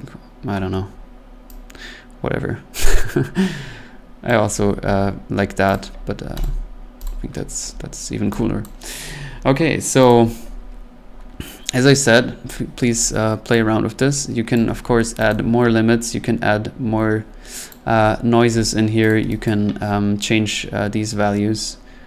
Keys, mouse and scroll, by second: 4.2 click, 4.8 middle click, 5.3 scroll, 5.7 click, 6.4 click, 7.0 click, 7.7 scroll, 8.6 click, 10.1 click, 14.5 click, 15.3 click, 16.0 middle click, 16.4 middle click, 16.8 middle click, 17.7 click, 19.1 click, 19.4 click, 20.4 scroll.